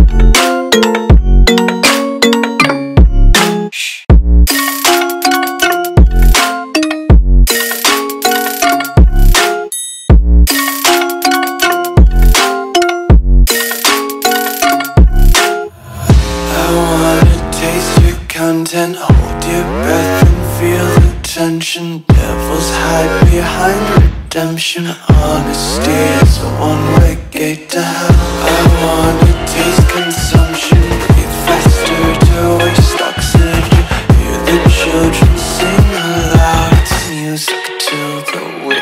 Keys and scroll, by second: 0.1 i, 4.7 a, 5.9 i, 7.0 v, 8.0 shift+super+[, 8.9 a, 10.6-13.6 typing, 15.2 space, 16.4 g, 18.0 x, 20.6 space, 21.2 a, 22.6-24.1 typing, 25.3 shift+super+[, 26.7 a, 28.3 i, 30.1 g, 33.0 v, 33.7 a, 35.3 i, 37.8 space, 38.3 space.